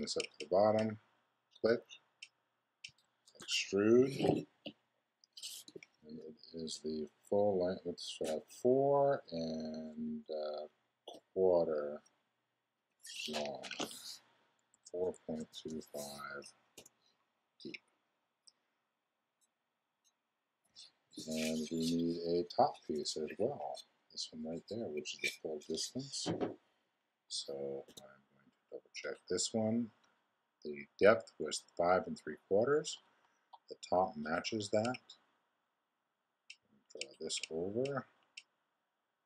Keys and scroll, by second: 3.2 super+e, 14.7 4, 27.9 x.